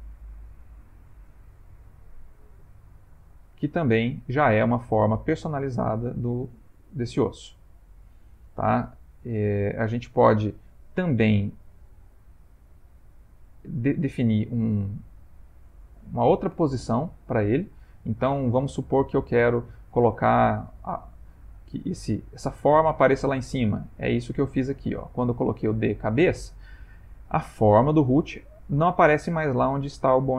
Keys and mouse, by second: 0.2 click, 3.0 ctrl+middle click, 3.6 shift+middle click, 4.2 ctrl+middle click, 5.6 click, 6.8 click, 7.4 click, 13.9 click, 21.3 middle click, 23.9 middle click.